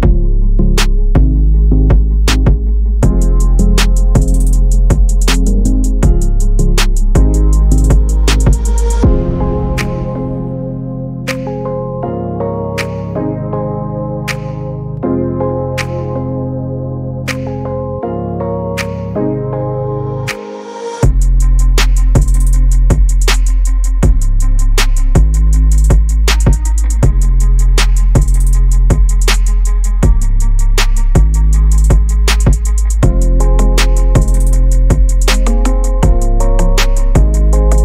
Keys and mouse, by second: 2.8 click, 3.0 click, 5.0 ctrl+b, 14.6 shift+middle click, 18.3 ctrl+r, 27.5 click, 29.1 ctrl+r, 35.5 middle click.